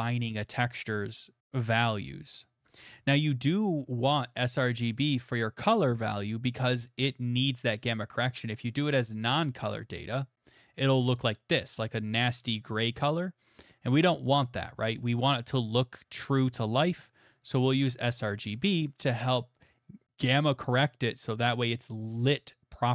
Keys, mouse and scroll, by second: 4.2 middle click, 4.7 middle click, 6.2 click, 7.0 middle click, 7.9 click, 12.0 middle click, 13.6 click, 19.3 middle click.